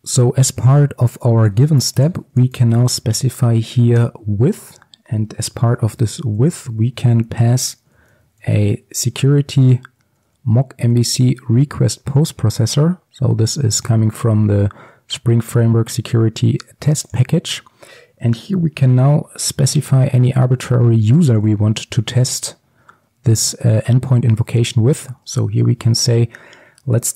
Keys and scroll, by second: 4.1 Return, 25.2 Return.